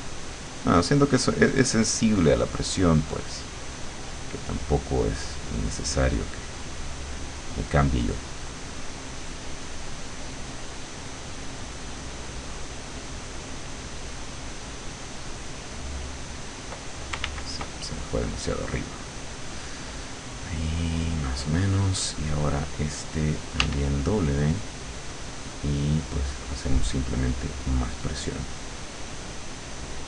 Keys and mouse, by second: 9.8-13.1 drag, 13.6-15.2 drag, 15.4-16.9 drag, 17.3 ctrl+z, 17.9-21.4 ctrl+drag, 23.6 w, 24.5-30.0 drag.